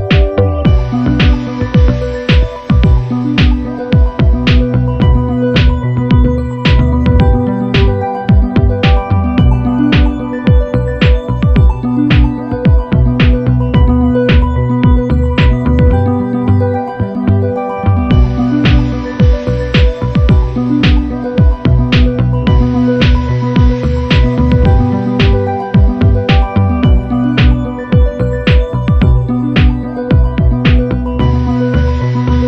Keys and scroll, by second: 4.0 super+=, 5.5 super+-, 7.5 super+=, 8.2 super+z, 10.8 shift+Down, 12.5 shift+Up, 14.8 super+-, 19.0 shift+Up, 19.3 shift+Down, 20.1 Down, 26.4 shift+Up, 28.4 shift+Up.